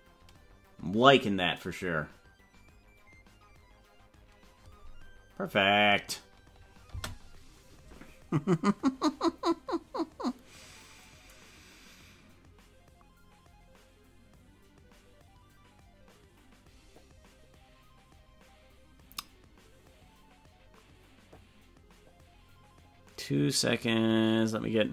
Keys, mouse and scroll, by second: 6.9 space.